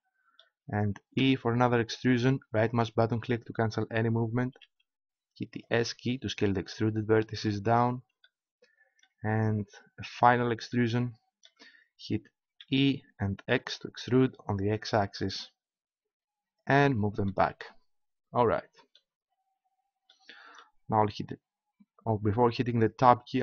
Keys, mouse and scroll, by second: 1.1 e, 4.5 s, 12.6 e, 16.7-18.9 drag.